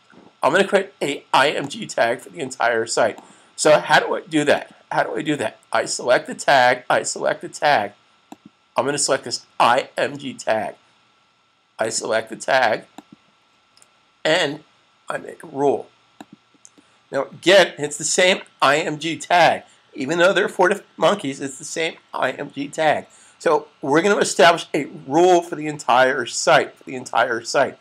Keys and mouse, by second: 1.5 click, 8.4 click, 11.6 click, 15.9 click.